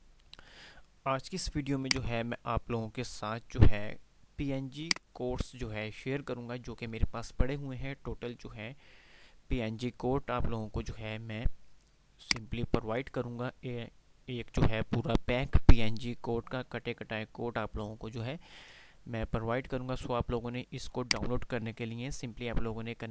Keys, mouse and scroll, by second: 1.9 click, 2.4 click, 3.2 click, 3.8 F5, 13.6 F5, 21.1 click.